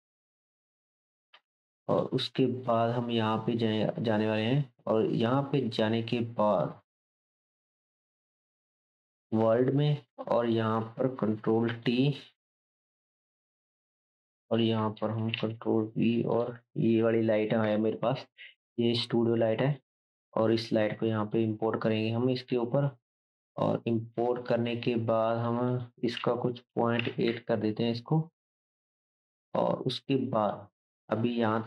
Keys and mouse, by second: 0.9 right click, 1.3-1.7 drag, 1.3 n, 1.7-11.8 shift+right drag, 2.6-6.1 drag, 7.4-10.5 drag, 11.4 ctrl+t, 11.9-13.1 drag, 13.1 ctrl+right click, 13.6 click, 16.9-25.7 drag, 16.9-25.5 right drag.